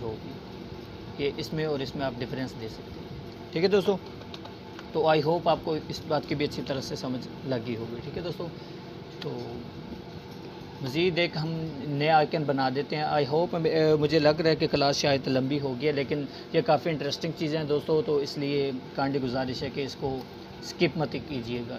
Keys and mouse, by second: 0.0 click, 0.6-0.9 click, 1.1 Delete, 2.6 click, 3.6 Delete, 14.6 click, 16.4 space, 16.6 click, 16.9-18.2 space, 17.6 space.